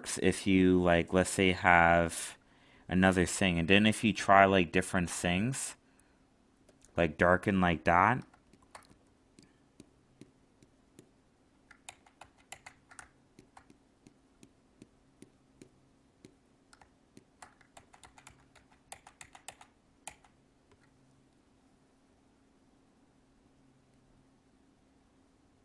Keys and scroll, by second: 11.8 ctrl+z, 17.7 ctrl+z.